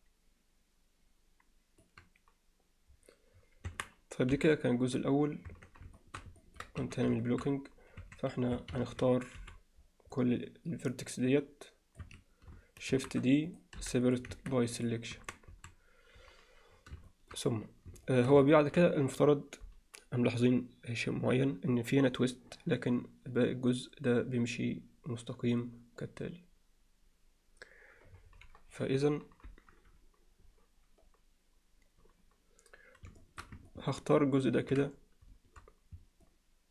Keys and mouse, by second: 3.7 Tab, 4.3 KP_1, 5.5 Tab, 6.0 alt+shift+middle drag, 6.4 ctrl+middle click, 6.8 z, 7.3 alt+shift+middle click, 8.0 1, 8.6 a, 9.4 c, 12.9 shift+d, 13.8 p, 14.3 Tab, 14.8 click, 15.2 Tab, 15.5 a, 17.1 alt+shift+middle click, 18.1 alt+shift+middle click, 18.5 ctrl+middle click, 33.2 shift+middle click, 33.7 ctrl+middle click, 36.3-36.7 alt+middle drag.